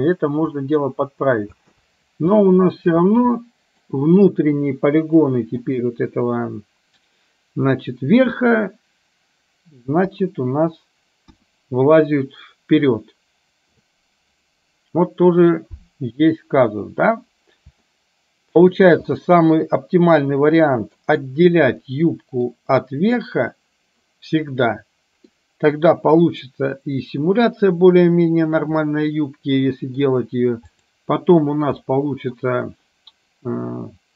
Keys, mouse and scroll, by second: 1.6 space, 2.6 shift+middle drag, 3.4-3.8 middle drag, 5.6 click, 10.1 KP_3, 11.3 KP_1, 17.9-18.6 shift+middle drag, 19.2-21.1 middle drag, 21.9-22.4 middle drag, 25.4-25.8 middle drag, 28.9-30.1 middle drag, 30.7 click, 31.9-32.4 middle drag.